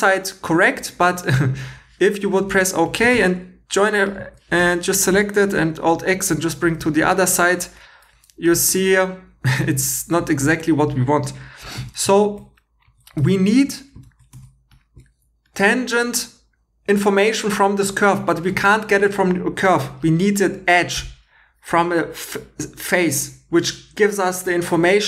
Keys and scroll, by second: 3.0 Tab, 4.2 Tab, 5.4 super+x, 11.8 super+z, 15.6 Escape.